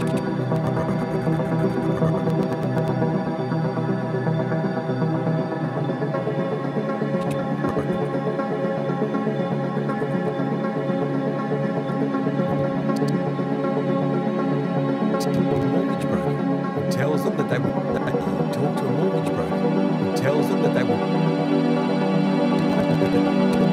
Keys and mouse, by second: 3.8-4.9 typing, 6.0-7.2 shift+drag, 10.2-11.8 drag, 10.9 typing, 11.9-13.9 drag, 13.8-16.0 typing, 15.2-17.1 drag, 17.1-18.1 typing, 17.9 click, 20.9 space, 21.7 click, 22.4-23.7 drag.